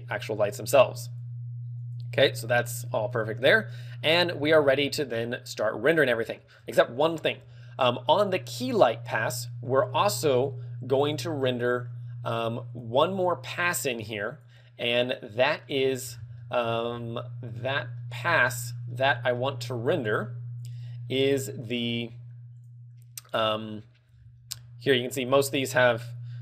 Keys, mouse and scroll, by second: 1.5 click, 2.1 click, 2.7 click, 3.2 click, 4.7 a, 5.1 ctrl+w, 6.5 shift+middle click, 6.7 ctrl+w, 6.7 shift+middle click, 8.9 click, 13.0 click, 14.6 click, 22.8 click, 23.5 click, 24.4 scroll down 4, 25.9 click, 25.9 scroll down 1.